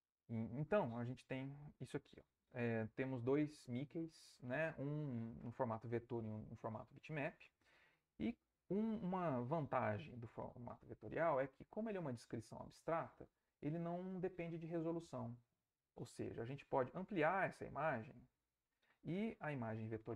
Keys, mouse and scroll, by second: 1.4 alt+Tab, 16.3 Right, 17.5 Right.